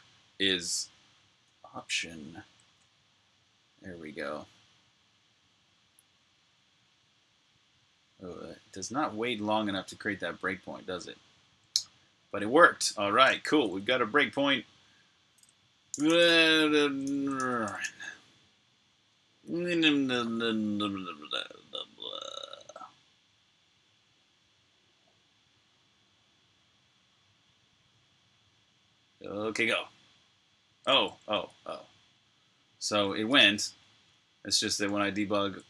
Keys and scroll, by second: 1.3-1.9 typing, 2.9-3.8 typing, 15.6-17.6 typing, 31.2 super+Tab, 34.7 shift+super+Tab.